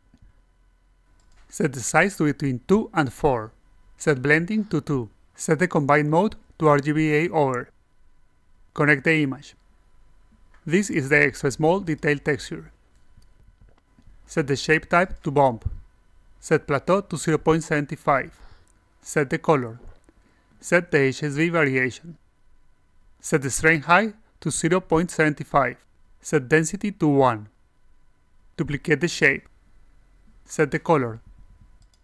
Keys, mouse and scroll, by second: 1.3 click, 3.2 click, 5.0 click, 7.9 click, 9.1 click, 10.9 click, 12.7 click, 13.9 click, 14.0 a, 14.9 click, 15.7 click, 16.3 click, 20.1 click, 22.1 click, 24.0 click, 26.1 click, 27.3-28.0 alt+drag, 29.2 click, 31.7 click.